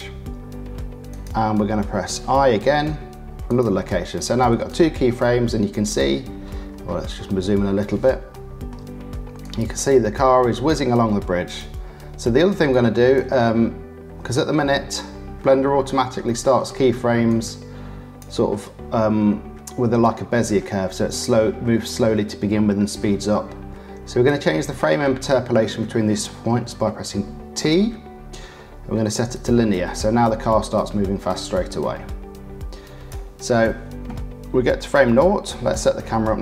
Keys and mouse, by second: 2.5 i, 4.7-5.9 drag, 8.3 shift+middle click, 8.6 shift+click, 8.7 shift+middle click, 9.4-11.5 drag, 11.5-12.7 middle drag, 12.7 click, 13.1-14.7 middle drag, 14.7 shift+click, 15.5 shift+middle click, 16.2 shift+middle click, 17.3 click, 20.1-24.3 drag, 27.6 t, 29.9 click, 33.1-35.7 middle drag, 35.0 click, 35.0 right click.